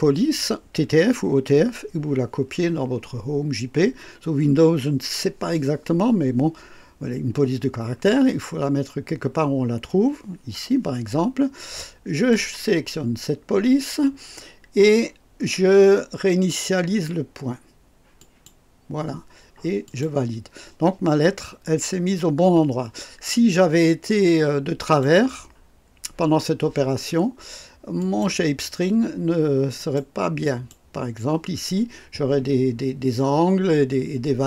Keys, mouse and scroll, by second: 12.1 click, 18.2 click, 19.8 click, 21.7-22.0 scroll up 1, 22.4-22.9 scroll down 1, 24.2-25.2 drag, 28.0 click, 29.8 click, 30.4 click.